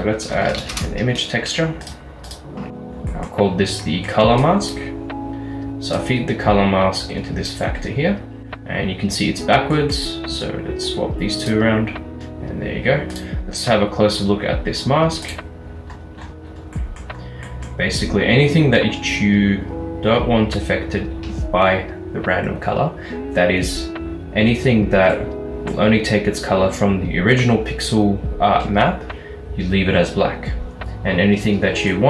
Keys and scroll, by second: 0.3-2.4 typing, 0.9 Return.